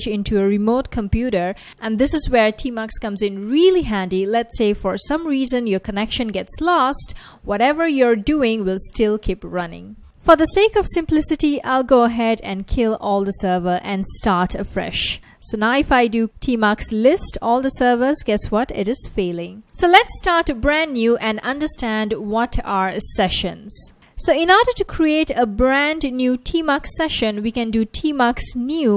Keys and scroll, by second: 9.8-16.1 typing, 18.6-18.9 typing, 25.7-28.9 typing.